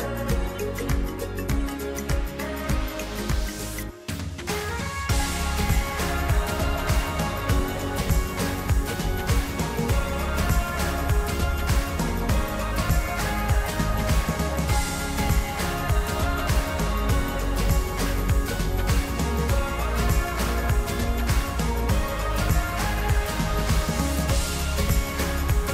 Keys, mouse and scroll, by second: 1.1 middle click, 1.2 middle click, 1.8-2.4 scroll up 32, 2.7 shift+middle click, 3.3 shift+click, 3.4 shift+click, 3.6 shift+click, 3.7 shift+click, 4.0 middle click, 4.9 shift+scroll down 1, 4.9 shift+middle click, 5.4 shift+click, 5.5 shift+click, 6.0-7.1 shift+middle drag, 7.1 shift+click, 7.2 shift+click, 7.3 shift+click, 7.8-9.3 shift+middle drag, 9.4 shift+click, 9.5 shift+click, 9.8 shift+middle click, 10.6 shift+click, 10.9 shift+middle click, 11.8 shift+click, 11.9 shift+click, 12.1 shift+middle click, 12.3 shift+click, 12.4 shift+middle click, 12.7 shift+click, 12.9 shift+middle click, 13.2 shift+click, 13.3 middle click, 13.5 scroll down 8, 13.8 middle click, 13.9 scroll up 1, 14.1 scroll down 1, 14.7 scroll up 1, 14.8-15.5 scroll down 4, 15.5-16.7 middle drag, 16.7 scroll down 3, 17.7-20.8 middle drag, 22.0-25.7 middle drag.